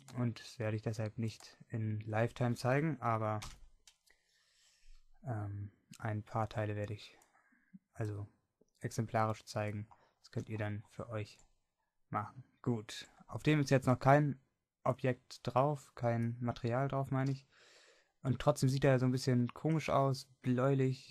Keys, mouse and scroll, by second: 3.5 KP_Divide, 4.7 middle click, 10.6-12.3 middle drag.